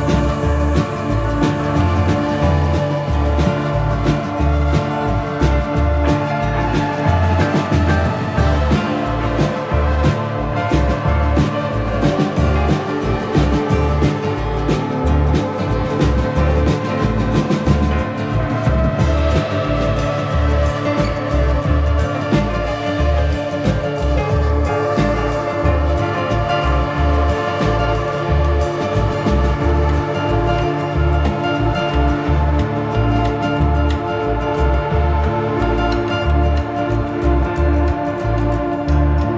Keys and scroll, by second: 5.1 ctrl+Page_Down, 6.7 ctrl+z, 12.1 ctrl+Page_Down.